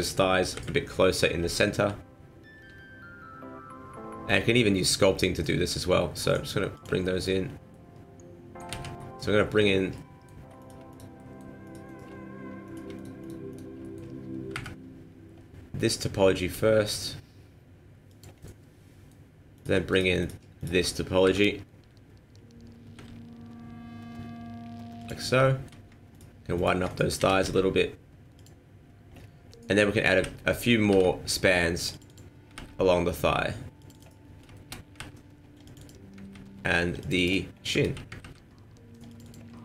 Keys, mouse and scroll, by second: 0.5 KP_1, 2.5 g, 7.0 middle click, 7.5-7.8 scroll up 2, 7.8 middle click, 8.7 ctrl+z, 8.9 middle click, 9.9 middle click, 10.6 right click, 10.9 shift+right click, 11.1 shift+middle click, 11.2 shift+middle click, 11.6 shift+right click, 12.7 right click, 12.9 shift+right click, 13.2 shift+right click, 13.5 shift+right click, 13.8 middle click, 14.5 KP_1, 16.4 g, 18.4 middle click, 19.5 right click, 19.9 shift+right click, 20.2 shift+right click, 20.6 shift+right click, 21.2 KP_1, 22.9 g, 25.3 scroll down 1, 25.4 shift+middle click, 26.1 alt+right click, 26.5 alt+right click, 27.2 s, 29.1 scroll down 4, 29.4 scroll up 1, 30.2 ctrl+t, 30.9 ctrl+r, 32.5 ctrl+r, 34.2-34.5 scroll down 1, 34.5 shift+middle click, 34.9 ctrl+r, 36.2 ctrl+r, 37.4 scroll down 1, 37.9 ctrl+z, 38.2 ctrl+r, 39.5 middle click.